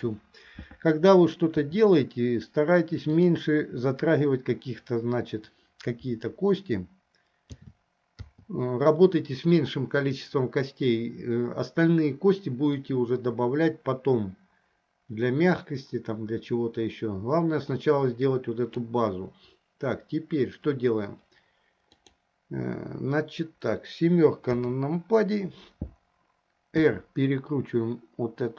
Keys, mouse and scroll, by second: 1.8 r, 7.7 a, 8.7 i, 13.0-19.2 drag, 22.0 click, 24.6 KP_7, 26.8 r.